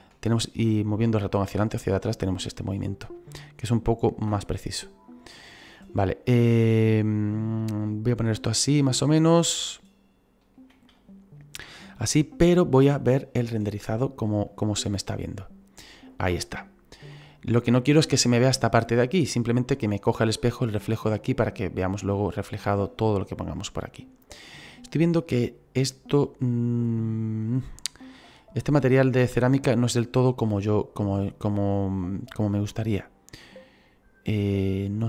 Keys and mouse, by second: 4.4 middle click, 5.8 middle click, 7.3 ctrl+middle click, 9.4 middle click, 10.9 shift+middle click, 13.7 click, 25.2 right click, 31.4 click, 33.5 click.